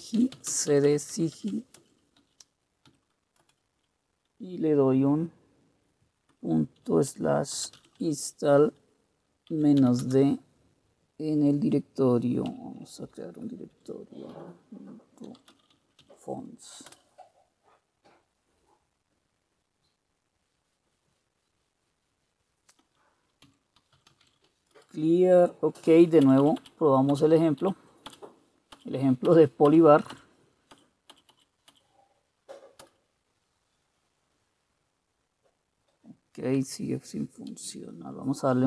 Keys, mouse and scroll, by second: 0.2-3.0 typing, 3.5 Return, 5.8-10.4 typing, 12.6 typing, 13.8-17.0 typing, 23.6-24.9 typing, 26.4 Up, 26.4 typing, 26.5 Up, 26.7 Up, 27.2 Up, 27.7 Up, 28.2-28.9 Up, 29.4 Up, 29.8 Up, 30.3 Up, 31.4 Up, 31.8 Up, 31.8 typing, 33.0 Return, 37.6 ctrl+c.